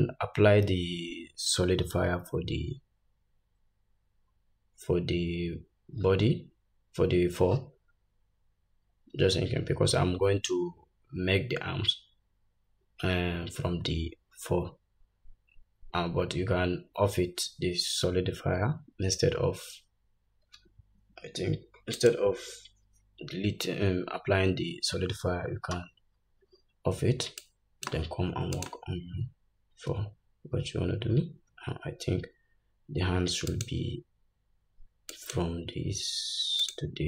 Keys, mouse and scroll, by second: 22.1 click, 26.3-27.6 scroll up 1, 27.6-28.8 drag, 30.1 Tab, 30.8-32.7 scroll down 2, 33.7 shift+click, 35.3 shift+click, 36.8 shift+click.